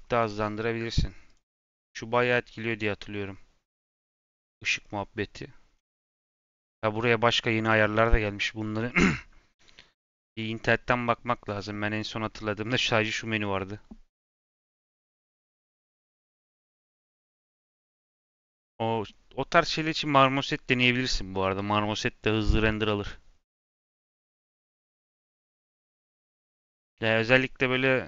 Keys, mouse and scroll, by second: 1.2-4.0 drag, 4.0 scroll up 1, 4.7-5.8 scroll up 7, 5.8-8.9 scroll up 3, 25.7-28.0 scroll up 5.